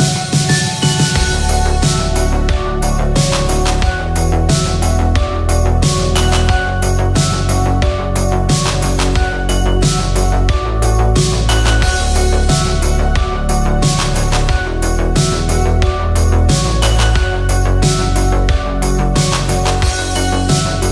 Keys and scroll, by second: 6.5-7.7 typing.